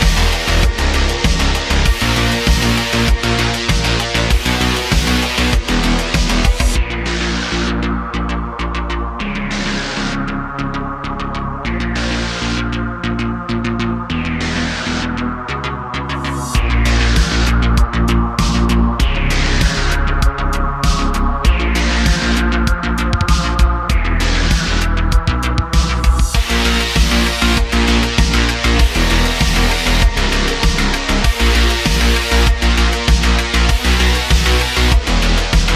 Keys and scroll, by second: 0.5 g, 3.1 Tab, 5.3 Tab, 6.4 g, 7.1 Tab, 10.4 Tab, 11.7 g, 12.6 ., 13.4 g, 17.3 g, 17.4 z, 22.7 g, 24.0 y, 25.3 g, 25.4 y, 26.3 g, 26.5 x, 28.1 g, 28.4 x, 30.0 Tab, 32.7 alt+shift+c, 33.5 s.